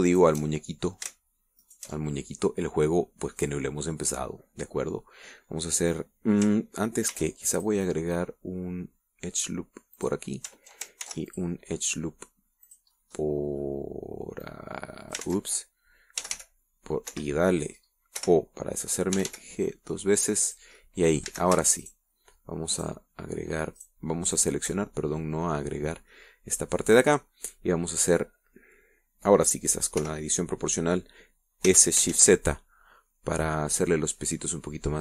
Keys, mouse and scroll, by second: 0.6 alt+shift+right click, 1.4 alt+shift+right click, 1.8 alt+shift+middle click, 3.0 alt+shift+right click, 3.3-4.9 alt+shift+middle drag, 5.3-6.8 middle drag, 8.5 ctrl+r, 8.9 ctrl+click, 11.3 click, 12.4 ctrl+r, 12.7 ctrl+click, 14.0-15.1 drag, 15.8 click, 16.6 ctrl+z, 17.6 g, 18.5 Escape, 19.6 o, 20.5 g, 21.8 click, 22.2 middle click, 22.6 a, 23.2 alt+shift+right click, 24.1 alt+shift+right click, 25.2 alt+shift+right click, 25.7 alt+shift+right click, 26.1 alt+shift+middle click, 27.2 scroll down 1, 27.5-29.6 middle drag, 30.1 middle click, 31.4 o, 33.0 s, 33.5 shift+z.